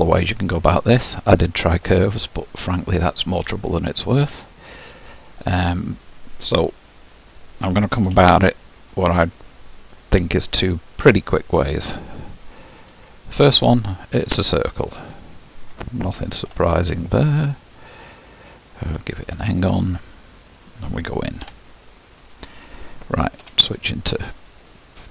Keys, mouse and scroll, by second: 0.0-1.0 middle drag, 1.0-1.9 scroll up 2, 1.9-5.9 shift+middle drag, 8.2 shift+a, 14.8-18.1 drag, 18.3-20.3 drag, 21.4 Tab, 23.4 3, 24.6-25.1 shift+middle drag.